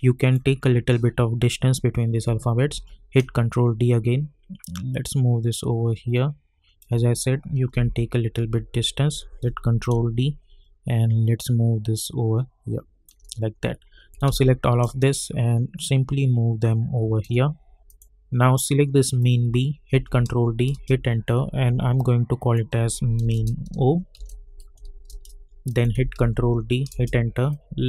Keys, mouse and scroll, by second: 2.6 ctrl+d, 3.1-7.7 drag, 7.7 Left, 9.4 ctrl+d, 9.8-14.2 drag, 14.2 ctrl+a, 14.8-17.8 drag, 19.9 ctrl+d, 20.7 Return, 21.9-24.1 drag, 24.1 shift+d, 25.1 Return, 25.7 click, 26.1 ctrl+d, 26.9 Return, 27.5-27.8 drag.